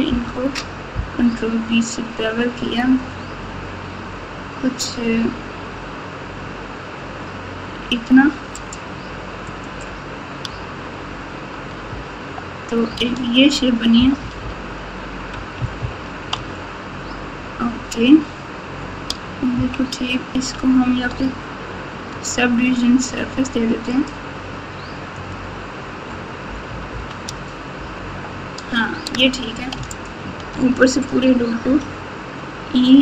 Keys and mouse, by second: 0.0 ctrl+b, 9.4 click, 10.4 Tab, 11.8 KP_8, 12.9 alt+z, 13.9 KP_8, 14.1 KP_8, 14.4 KP_8, 15.6 KP_2, 15.8 KP_2, 19.5 KP_1, 21.7 Tab, 22.0 Tab, 24.6 click, 26.6 KP_8, 26.9 KP_8, 27.2 Tab, 31.6 e.